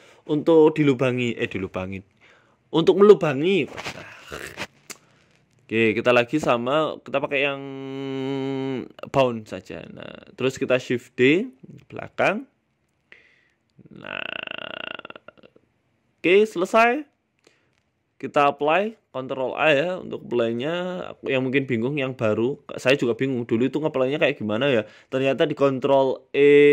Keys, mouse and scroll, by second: 1.1 click, 1.1 middle click, 1.6 right click, 2.6 click, 3.3 click, 3.7-4.3 scroll down 3, 4.3 click, 4.3-5.1 scroll down 1, 5.3 middle click, 5.8 scroll down 1, 5.9 scroll down 1, 6.4 click, 8.0 click, 8.9 scroll up 3, 9.1 scroll down 1, 9.3 shift+middle click, 9.6 middle click, 10.5 Tab, 11.5 shift+d, 13.8 Tab, 14.1 middle click, 14.8 shift+middle click, 15.0 middle click, 15.8 middle click, 16.7 right click, 17.8 click, 18.8 click, 19.1 ctrl+a, 19.8 right click, 20.4 Delete, 20.9 right click, 21.1 Tab, 21.3 middle click, 21.7 scroll up 2, 21.9 a, 22.1 a, 22.7 alt+shift+right click, 23.7 KP_1, 25.5 shift+middle click, 26.3 middle click.